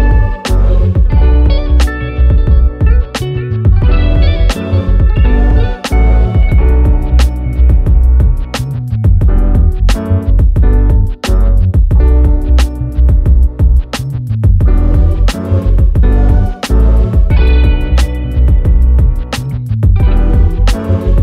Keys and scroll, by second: 0.0 ctrl+z, 1.3 ctrl+c, 2.0 ctrl+z, 4.1 ctrl+v, 13.7 ctrl+z.